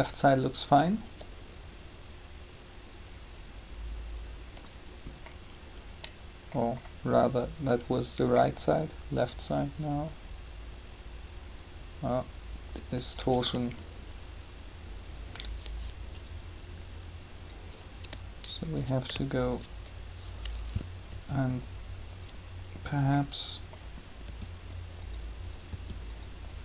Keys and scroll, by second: 21.1 r, 24.2 r.